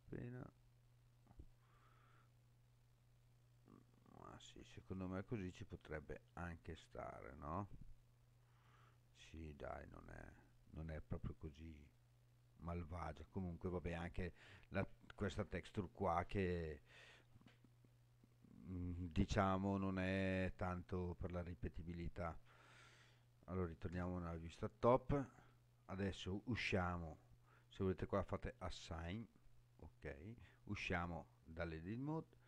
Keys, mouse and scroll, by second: 1.2 click, 2.1-2.7 scroll down 2, 2.7 scroll down 1, 3.2-5.1 middle drag, 5.5-8.0 middle drag, 8.2 scroll down 1, 8.9-9.6 scroll down 1, 9.6-11.9 middle drag, 23.9 KP_7, 24.9-25.8 scroll down 3, 25.8 scroll down 2, 28.3 click, 30.8 Tab.